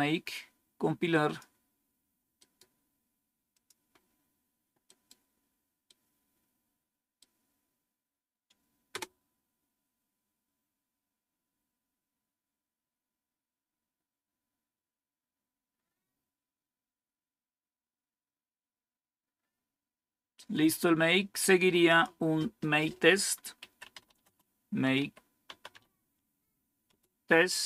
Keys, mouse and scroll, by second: 2.3 right click, 3.5 click, 4.8 right click, 5.8-7.2 right drag, 8.9 Return, 18.2 scroll down 3, 19.3-21.8 scroll up 2, 21.8 click, 23.3-26.2 typing, 26.8 Return.